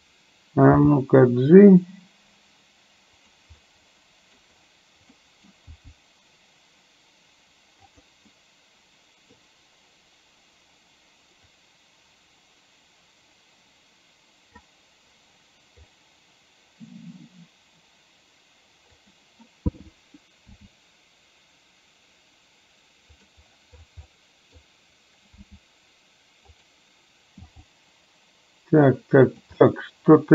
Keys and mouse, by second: 0.9 g, 3.7 middle click, 5.1 middle click, 5.7 g, 8.4-9.4 middle drag, 11.7-14.6 drag, 15.8 g, 20.6 s, 24.1 middle click, 25.6 s, 27.6 g, 29.7-30.3 middle drag.